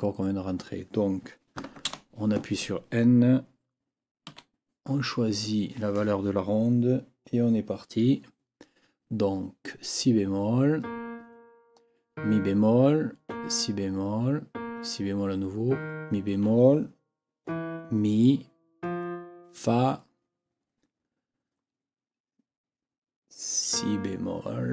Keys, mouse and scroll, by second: 1.9 n, 4.3 KP_7.